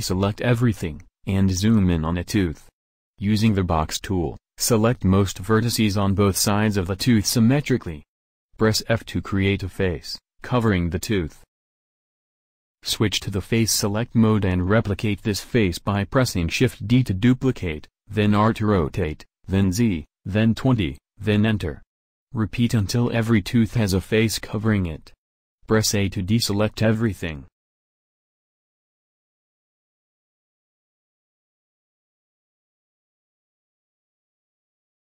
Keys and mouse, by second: 3.7 b, 11.1 f, 13.0-14.9 drag, 15.3 shift+d, 22.3 shift+d, 26.3-30.2 drag, 28.2 shift+d, 31.3 click, 31.8-33.9 drag, 31.9 shift+d, 34.8 shift+d.